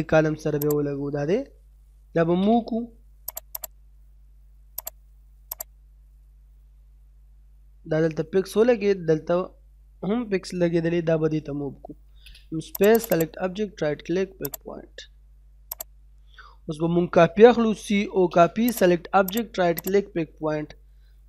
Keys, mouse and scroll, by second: 0.0-0.4 scroll up 1, 0.7 click, 2.2 m, 2.3 space, 3.3 click, 3.6 right click, 4.8 click, 5.9-6.6 scroll up 1, 7.3 middle click, 7.9-8.4 scroll up 1, 9.0 middle click, 9.5 scroll up 1, 10.8 middle click, 11.2-11.9 scroll up 1, 11.9 m, 12.2 space, 12.8 click, 13.1 right click, 14.5 click, 16.1 scroll down 1, 16.4 middle click, 16.7-17.6 scroll down 1, 17.6-18.2 typing, 18.4-18.7 scroll down 1, 18.7 click, 19.6 scroll down 1, 19.8 right click.